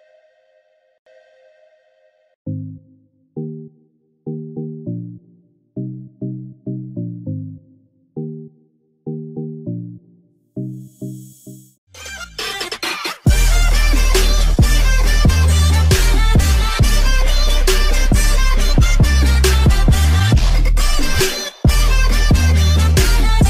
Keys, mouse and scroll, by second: 0.0-2.4 drag, 2.4 ctrl+g, 3.9 shift+F2, 5.8 F9.